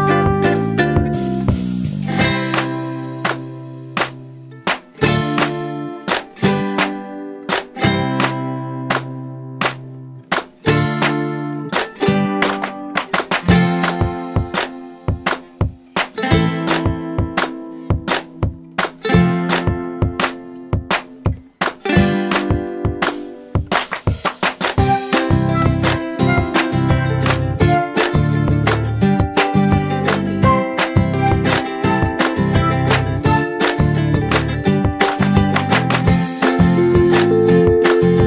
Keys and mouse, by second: 0.4-2.9 drag, 5.2 click, 10.2 click, 16.7 click, 20.4-21.7 drag, 24.5-30.3 drag, 28.4-29.6 drag, 33.1 click, 38.1 click.